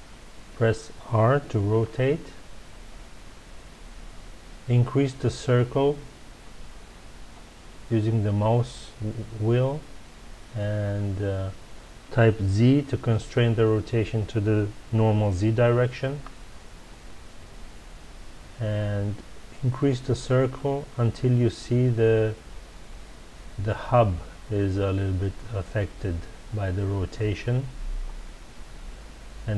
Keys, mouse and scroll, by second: 1.7 r.